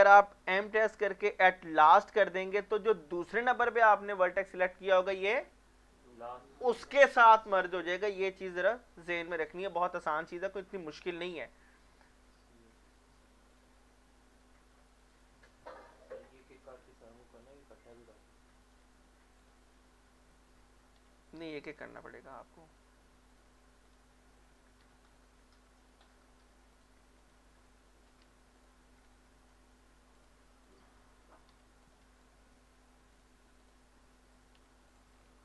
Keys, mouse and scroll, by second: 0.6 m, 1.9 click, 10.0-12.1 middle drag, 12.7 scroll up 1, 13.5 click, 14.0 shift+middle click, 15.0 shift+click, 16.0 m, 16.4 click, 16.8-17.1 scroll down 2, 17.1 middle click, 18.1-18.6 scroll up 2, 18.6 click, 19.4 shift+click, 19.7 scroll up 1, 21.0 m, 21.7 click, 22.1 scroll down 1, 22.4 shift+middle click, 22.8 scroll up 1, 23.3 click, 23.9 shift+click, 24.8 m, 25.1 click, 25.8 shift+middle click, 26.7 click, 27.2 shift+click, 28.2 m, 28.6 click, 29.3 shift+middle click, 30.2 click, 30.7 shift+click, 31.5 m, 31.8 click, 32.3 shift+middle click, 33.2 click, 33.6 shift+click, 34.6 m, 34.9 click, 35.2 scroll down 1.